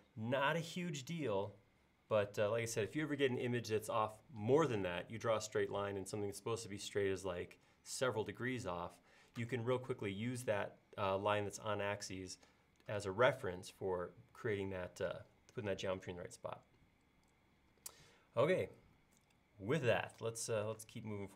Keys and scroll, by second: 20.8 space.